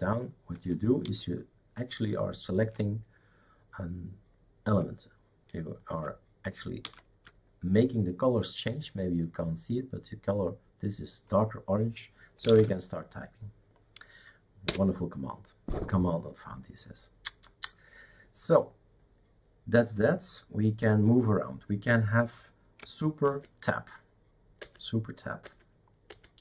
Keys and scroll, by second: 0.5 super+Right, 1.1 super+Left, 2.6 super+Right, 6.9 super+Left, 12.4 typing, 14.7 Return, 23.3 super+Tab, 24.6 super+Tab, 25.4 super+Tab, 26.1 super+Tab.